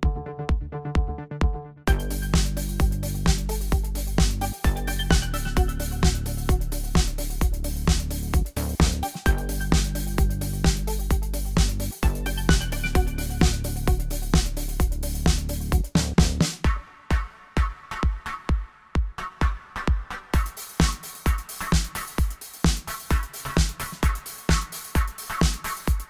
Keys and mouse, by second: 0.1 w, 0.6 w, 1.3-2.1 middle drag, 2.5 b, 3.6 w, 4.6 w, 7.6 w, 8.5 w, 13.7 middle click, 19.9 middle click, 20.6-22.9 drag, 22.9 middle click, 23.6 right click, 23.9 click, 24.7 ctrl+z, 25.0 g.